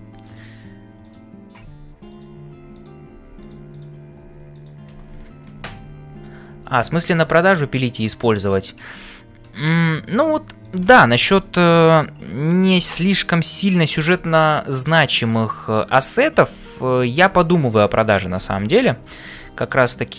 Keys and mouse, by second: 0.0-20.1 typing, 1.0 click, 2.8 click, 9.6 shift+middle click, 10.6 click, 11.1 middle click, 13.8 click, 18.6 ctrl+s, 19.4 shift+middle click, 20.0-20.1 middle drag.